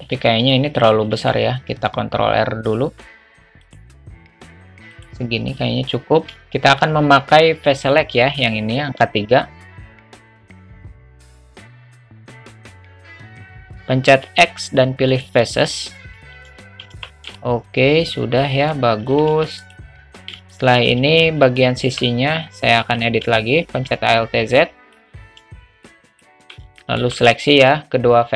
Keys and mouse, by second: 1.1 ctrl+r, 6.3 3, 6.4 a, 10.0 click, 12.0 shift+click, 16.5 alt+z, 16.9 Tab, 17.4-18.7 alt+middle drag, 20.5 shift+middle click, 21.9 Tab, 22.8 1, 23.8 alt+z, 24.7 click, 25.8 shift+click, 26.8 shift+middle click.